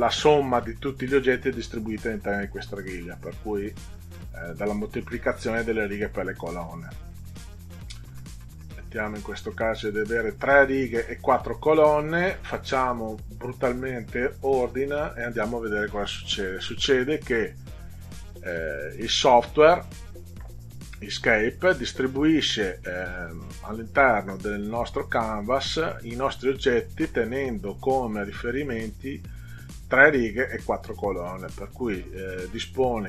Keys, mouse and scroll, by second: 8.1 click, 14.6 click, 17.3-18.3 middle drag.